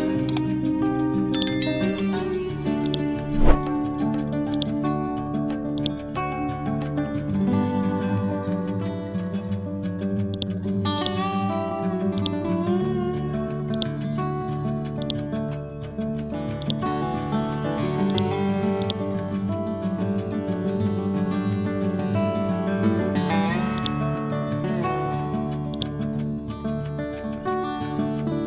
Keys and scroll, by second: 19.3 Up.